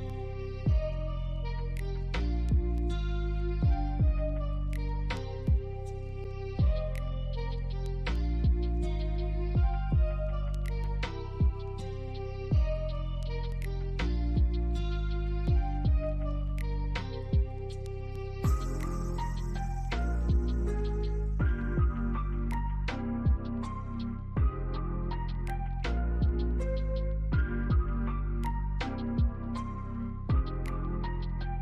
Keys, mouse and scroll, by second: 0.1 alt+scroll up 1, 0.8 alt+middle click, 1.2 alt+scroll down 2, 1.8 alt+middle click, 3.0 alt+click, 5.3 right click, 6.8 double click, 9.9 alt+middle click, 10.3 alt+click, 12.6 double click, 12.9-13.3 scroll down 1, 13.4 alt+click, 14.7 double click, 19.1 double click, 21.1 scroll down 1, 21.4 alt+click, 22.6 typing, 23.6 scroll down 1, 23.9 alt+click, 26.8 ctrl+click, 27.9 ctrl+scroll down 1, 28.3 alt+middle click.